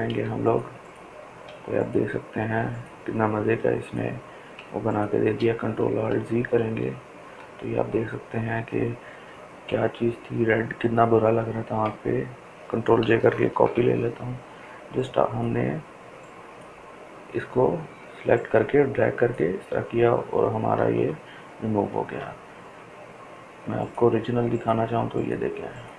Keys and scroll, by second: 5.4 ctrl+alt+z, 5.9 ctrl+alt+z, 12.9 ctrl+j, 20.2 ctrl+z.